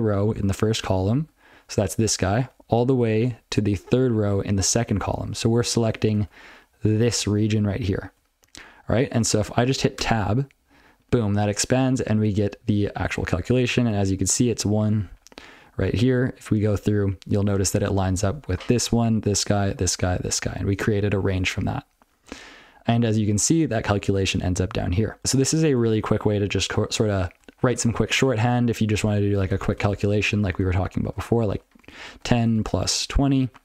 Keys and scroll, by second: 0.0 ctrl+f, 0.6 ctrl+p, 1.0 ctrl+f, 1.3 ctrl+p, 1.5 ctrl+n, 2.2 ctrl+n, 2.4 ctrl+n, 2.8 ctrl+f, 3.0 ctrl+f, 3.2 ctrl+f, 3.8 ctrl+f, 4.2 ctrl+f, 4.6 ctrl+f, 5.0 ctrl+p, 5.3 ctrl+p, 5.5 ctrl+p, 5.7 ctrl+n, 5.9 ctrl+space, 6.1 ctrl+l, 6.5-6.8 ctrl+f, 6.9 ctrl+n, 7.2 ctrl+f, 7.4 ctrl+f, 7.5 ctrl+f, 7.7 ctrl+f, 8.0 ctrl+g, 8.4 ctrl+n, 8.6 ctrl+g, 8.8 ctrl+n, 9.0 ctrl+b, 10.0 Tab, 13.0 ctrl+b, 13.2 ctrl+b, 13.4-13.9 ctrl+b, 14.3 ctrl+f, 14.6 ctrl+b, 14.8 ctrl+f, 15.6 ctrl+f, 16.3-16.9 ctrl+f, 22.2 ctrl+n, 23.2 ctrl+a, 23.3-23.8 ctrl+f, 24.0 ctrl+a, 24.2 ctrl+n, 24.8 ctrl+p, 25.0 ctrl+p, 25.2 ctrl+/, 25.4 ctrl+p, 25.6 ctrl+n, 28.7 ctrl+b, 28.8 ctrl+n, 28.9 ctrl+b, 29.1 ctrl+b, 29.4 ctrl+alt+space, 30.2 ctrl+g, 30.5 ctrl+alt+space, 30.9 ctrl+w, 31.2-33.6 typing.